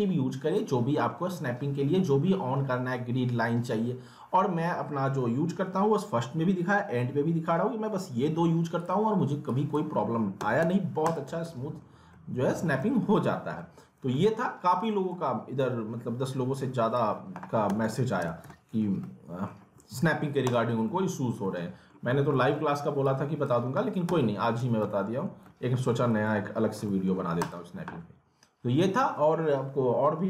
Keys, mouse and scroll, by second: 8.8 click, 9.5 click, 10.4-11.3 typing, 11.0 click, 11.5 alt+middle click, 11.9 scroll down 1, 12.1 alt+middle click, 13.2 scroll up 1, 13.6 alt+middle click, 14.1 alt+middle click, 15.2 alt+middle click, 16.1 scroll down 1, 16.6 click, 17.4-18.7 typing, 18.5 alt+middle click, 18.8 scroll down 1, 19.0 alt+middle click, 19.6 scroll up 1, 19.8 alt+middle click, 20.4 click, 20.7 scroll up 1, 20.9 alt+middle click, 22.0 scroll down 1, 22.3 alt+middle click, 23.0 click, 24.1-24.6 typing, 24.9 alt+middle click, 25.2 scroll down 1, 25.4 alt+middle click, 26.1 scroll up 1, 26.2 alt+middle click, 27.4 click.